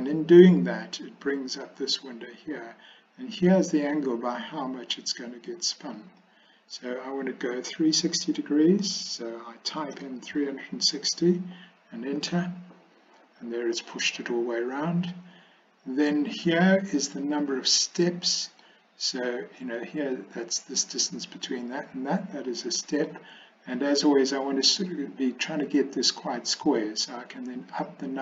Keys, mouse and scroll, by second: 6.0-12.7 drag, 18.0-18.7 scroll up 1, 18.7-22.0 middle drag, 22.5-23.2 scroll up 1, 27.7 click.